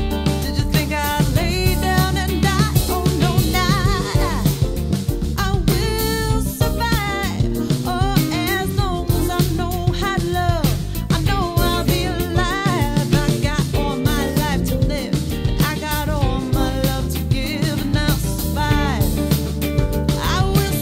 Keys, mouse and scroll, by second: 1.7 click, 3.1-5.0 drag, 7.8-11.4 drag, 11.4 1, 13.2 click, 14.3 click, 14.5-20.8 drag.